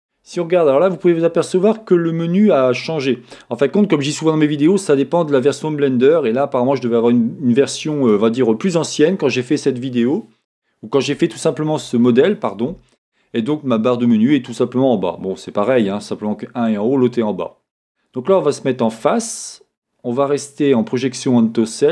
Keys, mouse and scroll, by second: 3.6-15.7 middle drag, 15.7-21.9 drag.